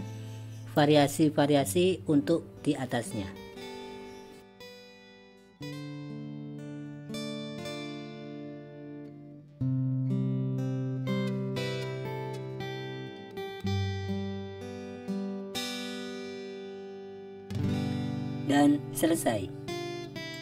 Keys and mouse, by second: 4.5-5.0 drag, 5.3 click, 6.4 click, 7.4 click, 8.0 click, 8.7 click, 9.3 click, 10.6 click, 12.0 click, 13.0 click, 13.5 click, 14.0 click, 14.3 click, 15.4 click, 16.2 click, 16.4 click, 17.3 click, 17.6 click, 18.2-18.6 drag, 19.1 click, 20.2 drag.